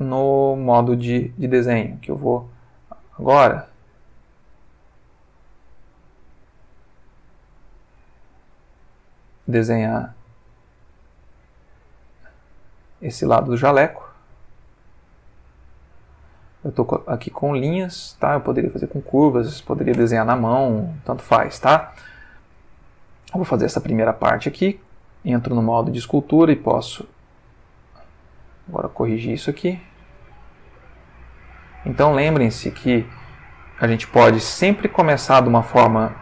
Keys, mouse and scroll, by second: 0.6 click, 2.0 click, 2.8 click, 5.2 click, 7.6 click, 9.1 click, 11.4 click, 13.4 click, 14.9 click, 16.2 click, 17.6 click, 18.6 click, 19.9 Return, 21.1 ctrl+middle click, 22.0-23.5 ctrl+shift+middle drag, 24.8 ctrl+Tab, 25.8 click, 26.8 f, 27.9 click, 28.6 click, 29.7 click, 30.6 click, 31.3 click, 32.3-33.1 drag, 33.4-34.1 drag, 34.8-35.6 drag, 35.7 click.